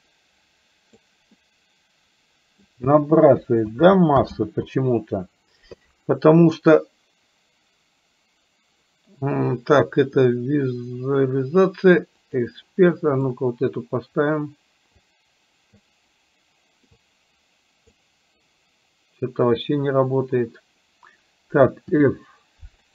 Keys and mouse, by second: 1.4-2.7 middle drag, 3.9 ctrl+z, 4.6 ctrl+z, 12.3 click, 12.9 middle click, 15.4 click, 17.2 click, 19.6 click, 21.9 f.